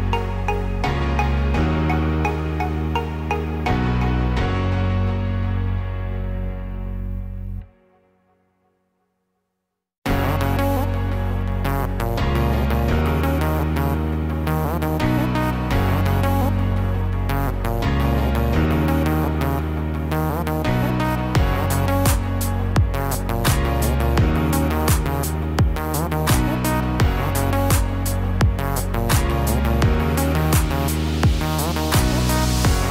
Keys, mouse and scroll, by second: 2.2 Tab, 2.8 scroll down 1, 3.5 middle click, 3.5 scroll down 5, 4.2-5.2 scroll up 3, 5.1 middle click, 5.9 scroll up 2, 7.0 middle click, 7.7 click, 8.2-8.7 scroll up 1, 8.7 scroll down 1, 9.0 scroll down 2, 9.1 middle click, 9.8 click, 10.4 Tab, 11.6 Tab, 13.0 Tab, 13.0-14.2 scroll up 2, 14.9 ctrl+r, 25.3 Tab, 26.5-27.2 scroll down 3, 27.0 middle click, 27.9-28.3 scroll up 2, 28.4 middle click, 31.9 middle click, 32.5 scroll up 3.